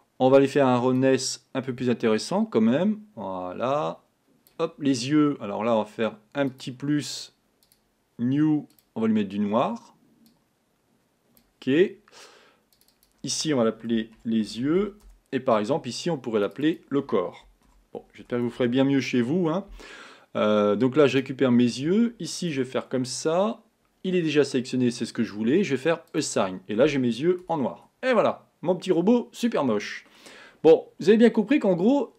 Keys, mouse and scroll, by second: 1.1-7.1 drag, 7.7 click, 8.8 click, 12.9 click, 16.0 click, 16.6 click, 16.7-21.6 drag, 22.8 Tab, 23.2-25.6 scroll up 2, 26.2 click, 27.6 Tab, 27.7-28.2 scroll down 2, 28.2-30.4 middle drag, 30.4 scroll up 1, 30.6-30.9 scroll down 1.